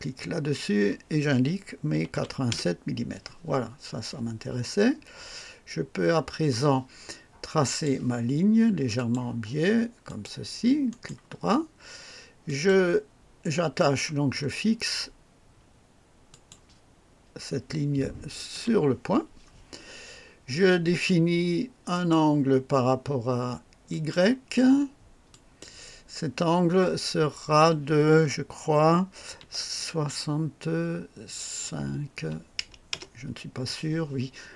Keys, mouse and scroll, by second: 0.6 i, 1.9-2.7 typing, 2.5 Return, 2.7 KP_Enter, 7.7 click, 8.9 click, 10.1 click, 10.9 right click, 12.5 click, 14.3 scroll up 1, 16.3 click, 18.5 o, 21.9 click, 23.9 click, 25.3 click, 29.4 KP_6, 32.2 KP_5, 32.9 Return, 33.1 KP_Enter.